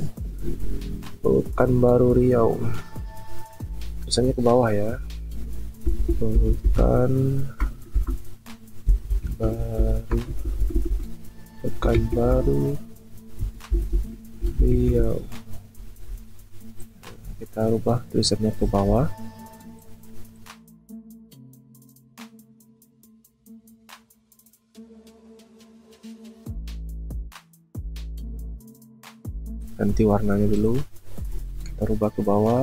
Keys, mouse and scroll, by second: 5.9 typing, 7.9-10.3 typing, 11.8 typing, 13.4-14.4 typing, 16.3 typing, 25.5 ctrl+t, 26.4 shift+click.